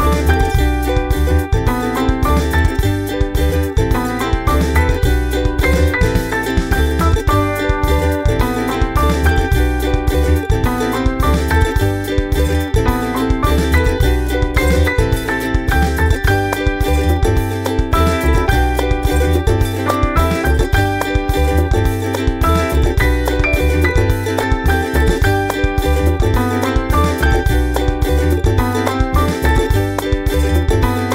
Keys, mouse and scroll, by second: 0.4 click, 1.2 click, 2.0-3.2 drag, 3.6-4.8 drag, 5.3 ctrl+scroll up 4, 6.2 ctrl+scroll up 2, 6.8-7.8 drag, 8.2 ctrl+z, 9.2 click, 9.5 click, 10.3 click, 11.0-13.6 ctrl+scroll up 18, 14.0 ctrl+scroll up 2, 14.6 click, 15.2 scroll up 2, 15.9 scroll up 2, 18.9 click, 19.5-22.0 typing, 23.6 scroll up 2, 26.4 click, 27.6 click, 29.0 scroll down 1.